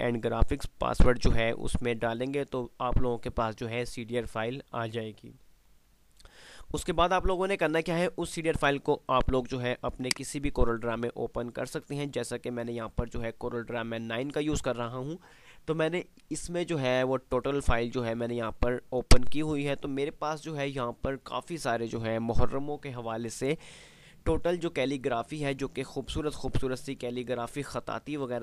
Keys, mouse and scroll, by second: 10.2 click, 12.5 typing, 16.0 F5, 18.6 F2, 19.2-23.6 drag.